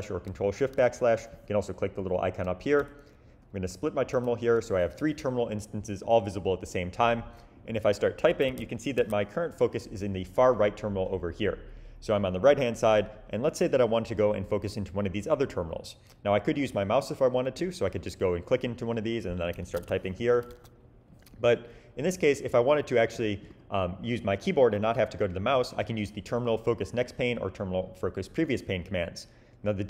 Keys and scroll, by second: 2.8 super+\, 4.1 super+\, 8.4 1, 9.0 2, 19.4-20.6 typing.